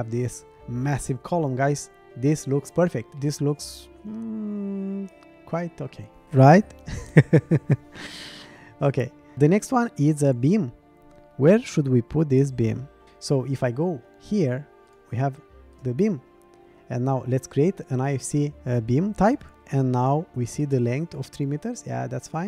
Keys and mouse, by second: 1.6-3.1 middle drag, 3.2-5.4 middle drag, 12.4 shift+middle click, 14.9 click, 15.7 click, 17.5 click.